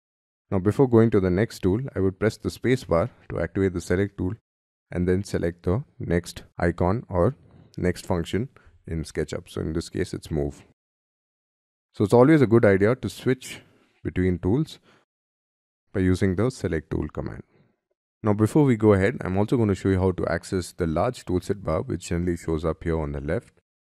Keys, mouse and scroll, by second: 1.0 middle click, 2.9 space, 12.6 space, 15.3 space.